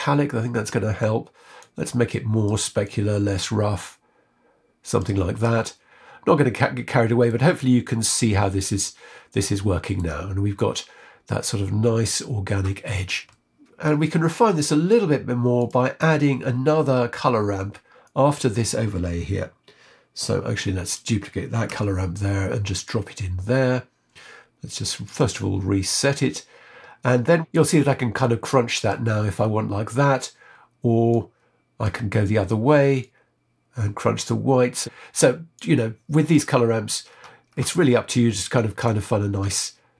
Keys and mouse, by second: 1.5 click, 2.8-4.9 drag, 5.6-7.2 middle drag, 8.3-9.9 middle drag, 13.1 middle click, 14.1 middle click, 15.5 click, 20.8 click, 22.7 shift+d, 25.0-26.1 drag, 27.5-29.5 drag, 31.1 click, 32.9-34.8 drag, 35.5 click, 38.1 middle click.